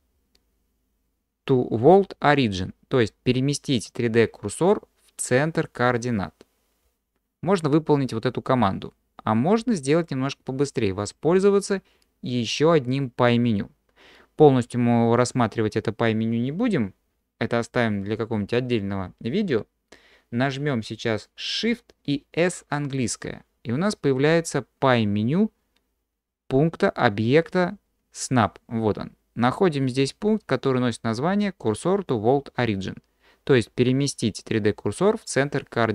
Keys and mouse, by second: 23.1 shift+s.